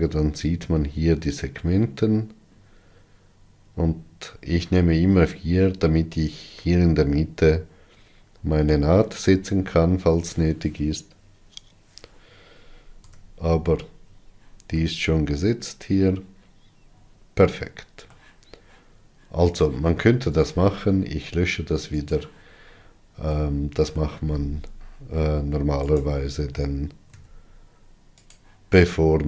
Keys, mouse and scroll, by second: 13.7 Tab, 14.4-14.9 scroll down 3, 15.1-15.4 scroll down 1, 15.4-18.8 middle drag, 21.1 Tab, 22.8 click, 24.1-26.6 middle drag, 26.6 click, 29.0 o.